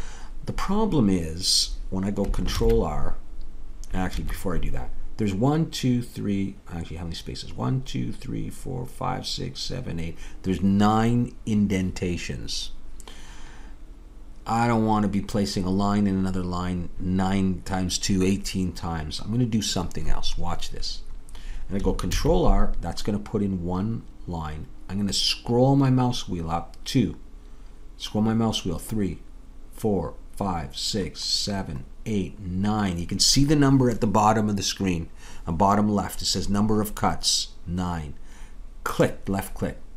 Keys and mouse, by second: 2.6 ctrl+r, 22.2 ctrl+r.